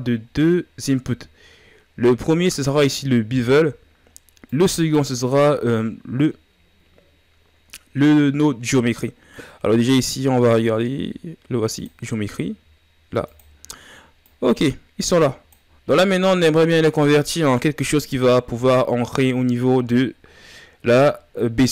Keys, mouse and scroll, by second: 5.5-8.9 drag.